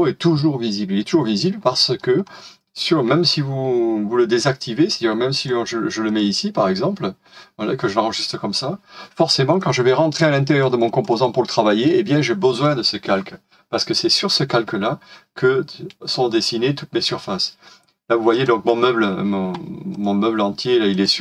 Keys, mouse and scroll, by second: 1.4 middle click, 2.2-5.4 scroll up 1, 9.7 double click.